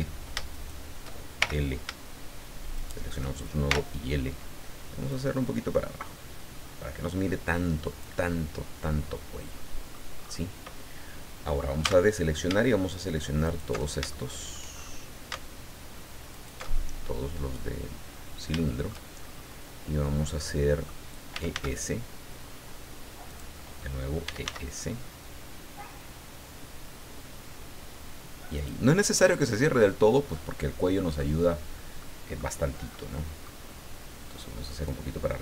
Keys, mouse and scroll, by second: 0.5 shift+right click, 1.4 shift+l, 2.7 shift+right click, 3.7 shift+l, 5.1-8.2 drag, 8.3-10.1 middle drag, 10.2-10.5 scroll up 1, 11.8 a, 13.4 alt+shift+right click, 14.1 alt+shift+middle click, 14.7-15.3 shift+scroll up 2, 16.3 alt+shift+right click, 16.9-17.6 alt+shift+scroll down 3, 18.2-18.5 scroll down 2, 18.6 shift+middle click, 19.2-19.6 shift+scroll up 3, 19.7 scroll down 2, 20.2 middle click, 21.0-22.0 typing, 23.3 click, 24.0-24.9 typing, 28.6 click, 29.0 scroll down 2, 29.2 middle click, 29.2-31.4 drag, 32.0 middle click, 32.6 middle click, 34.8-35.4 drag.